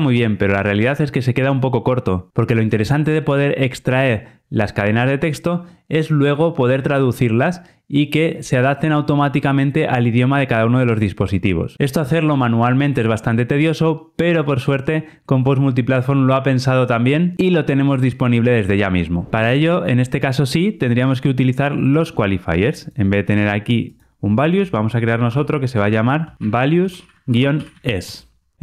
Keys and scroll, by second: 25.2 super+n.